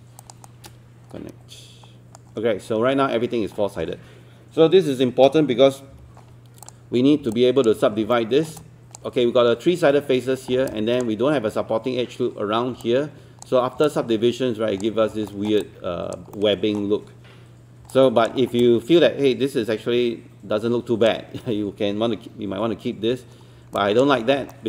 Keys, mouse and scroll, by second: 0.2 shift+click, 0.5-2.4 shift+right drag, 3.6-4.5 scroll down 1, 5.9 3, 6.7 click, 7.0 scroll up 1, 7.3 alt+click, 7.8 scroll up 1, 8.1 alt+middle click, 8.6 alt+click, 10.5 scroll down 1, 10.7 alt+click, 12.9-14.9 alt+drag, 15.1 scroll down 1, 15.3 alt+middle click, 15.6 alt+click, 16.3 alt+middle click, 17.9 alt+click, 18.4 scroll down 1, 18.7-21.1 alt+drag, 23.1 1, 23.8 alt+click, 24.2 scroll up 1, 24.5 alt+middle click.